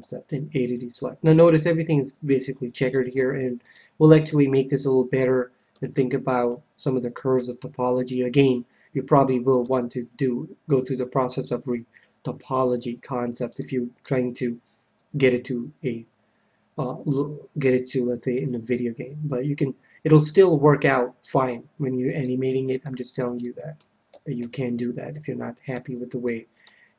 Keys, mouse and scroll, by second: 3.6-7.5 middle drag, 9.6 KP_1, 13.6-16.0 middle drag, 18.2 KP_1, 22.2-26.9 middle drag, 24.1 a, 24.3 a.